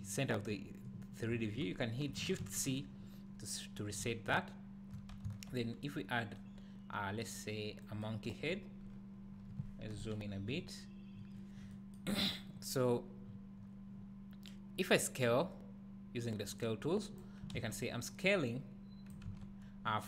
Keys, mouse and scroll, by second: 2.4 shift+c, 5.2 shift+a, 8.5-9.9 scroll up 2, 9.9 KP_Decimal, 10.5 `, 13.3-15.0 drag, 17.6 ctrl+z, 18.2 click, 19.3 ctrl+z.